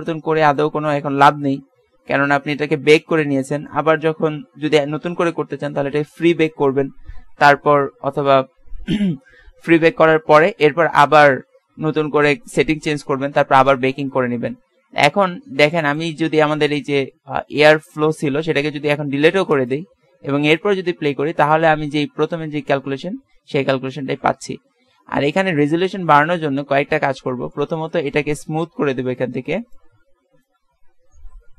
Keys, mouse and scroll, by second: 15.8-18.9 drag, 18.9 x, 20.8 alt+a, 24.8 Escape, 25.8 KP_0, 26.6-27.9 middle drag, 27.9-29.0 drag, 30.0 click.